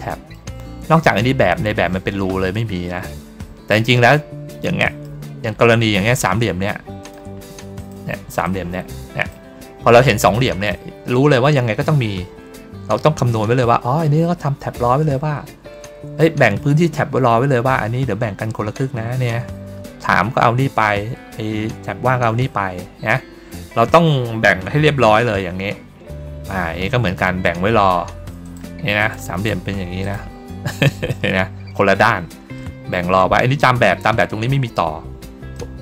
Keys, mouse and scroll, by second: 2.4 middle click, 3.3 middle click, 3.9 middle click, 4.7 middle click, 5.2 ctrl+middle click, 6.9 click, 7.7 shift+click, 8.3 click, 22.6-23.3 ctrl+scroll down 4, 23.8 middle click, 25.3 ctrl+scroll down 2, 25.6 ctrl+middle click, 26.2 ctrl+middle click, 28.3 click, 28.9 shift+click, 29.9 click, 30.7 ctrl+middle click, 32.5 middle click, 35.4 middle click.